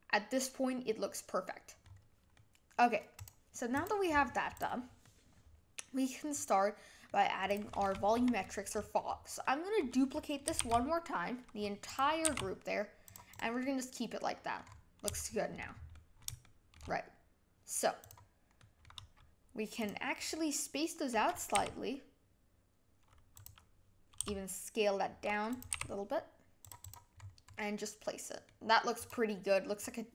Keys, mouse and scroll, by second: 0.4 middle click, 1.8-2.3 scroll down 6, 2.3-3.8 middle drag, 3.8 click, 4.6 click, 5.0-7.5 middle drag, 7.5 click, 7.9-8.4 scroll up 5, 8.7-9.1 middle drag, 9.1 scroll down 3, 9.4-10.9 middle drag, 10.9 shift+d, 12.2 g, 13.3 drag, 13.6-14.6 middle drag, 14.6 scroll up 4, 15.1-18.1 shift+middle drag, 18.1 click, 18.6-18.9 middle drag, 18.9 scroll down 2, 19.8 click, 21.6 g, 24.2 s, 25.7 g, 26.8 click, 27.2-27.5 scroll up 4, 27.5-29.1 middle drag, 29.1 click.